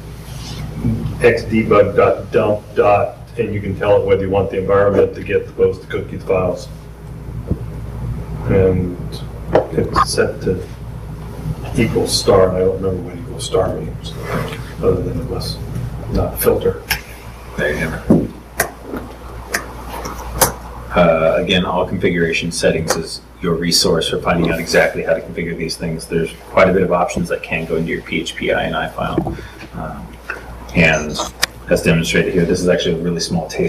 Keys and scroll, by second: 12.6 super+Tab.